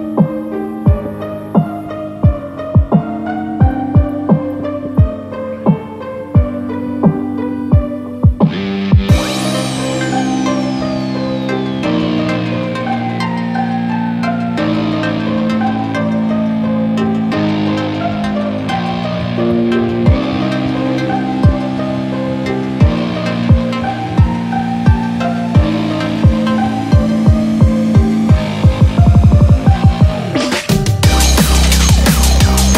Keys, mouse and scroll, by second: 0.0 shift+middle click, 0.3 middle click, 1.3 scroll down 2, 1.5 middle click, 2.8 scroll up 2, 3.1 middle click, 4.2 shift+middle click, 4.5 scroll up 2, 4.8 shift+middle click, 5.2 middle click, 6.7 Tab, 7.4 scroll down 1, 8.0 alt+z, 8.6 KP_1, 9.2 scroll up 3, 9.7 shift+middle click, 10.0-10.3 scroll up 2, 11.4 click, 12.9 s, 16.3 2, 16.7 3, 16.9 4, 18.5 Tab, 18.5 middle click, 18.5-19.2 scroll down 4, 19.2 alt+z, 19.3-19.9 alt+scroll down 6, 19.9 middle click, 20.4 scroll up 2, 20.6 scroll down 2, 20.8 middle click, 21.5-21.9 scroll down 5, 22.0 shift+middle click, 22.2 middle click, 22.5 scroll up 2, 23.2 scroll up 1, 23.4 right click, 24.7 scroll down 3, 25.0 middle click, 25.9 scroll up 2, 26.2 middle click, 28.7-29.0 scroll down 3, 29.0 middle click.